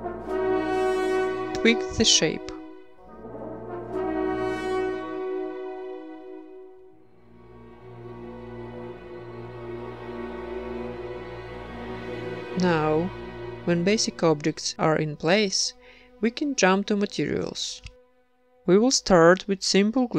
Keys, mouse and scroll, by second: 1.9 Tab, 2.5 ctrl+r, 3.2-14.7 typing, 3.5 right click, 3.7 Tab, 4.0 Tab, 4.4 ctrl+r, 5.5 Tab, 5.6 Tab, 5.9 click, 6.0 Tab, 6.1 click, 7.5 Tab, 8.3 Tab, 8.8 click, 9.8 click, 10.1 Tab, 10.2 Tab, 10.3 click, 10.6 click, 11.1 Tab, 11.2 Tab, 11.3 click, 11.6 Tab, 11.6 Tab, 12.0 right click, 12.2 Tab, 12.3 Tab, 12.4 Tab, 12.6 ctrl+s, 12.8 middle click, 13.0 click, 13.5 middle click, 13.5 Tab, 14.1 ctrl+s, 14.7 ctrl+s, 14.8 middle click, 14.9 ctrl+s, 16.3-18.2 drag, 18.2-20.1 right drag.